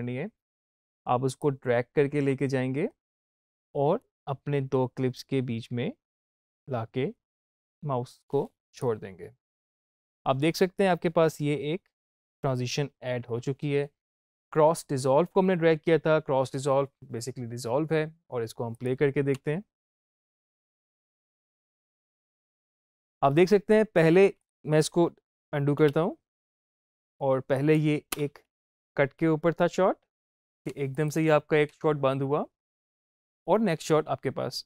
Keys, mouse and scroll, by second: 1.3-18.5 drag, 18.6 click, 19.2 space, 22.0-22.3 typing, 24.2 typing, 24.3 click, 25.7 ctrl+z, 26.8 click, 28.0 space, 30.6 space, 30.8 click, 31.6 space.